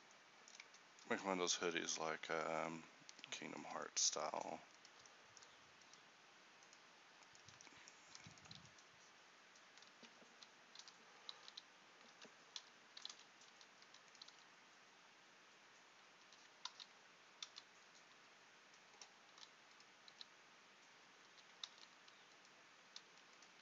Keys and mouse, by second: 8.2 e, 8.6 s, 10.8 o, 11.6 s, 12.6 o, 13.2 s, 13.9 e, 14.4 s, 16.8 ctrl+z, 19.5 e, 20.2 s, 21.8 ctrl+z, 23.2 z.